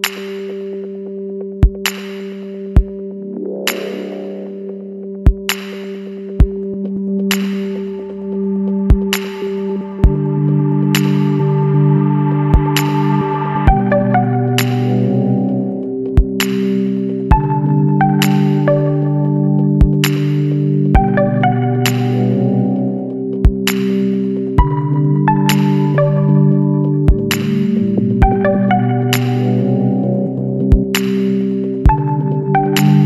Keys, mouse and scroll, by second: 0.3 click, 2.5 click, 3.9 l, 5.7 click, 9.2 click, 10.5 click, 11.0 scroll down 1, 11.5 scroll down 1, 13.6 click, 14.6 click, 17.9 click, 19.7 space, 20.4-21.0 scroll down 2, 21.5-22.7 drag, 22.9-23.5 scroll down 2, 24.2 click, 24.9-25.2 scroll up 1, 25.9-27.8 drag, 28.2-28.6 scroll up 1, 30.5 click.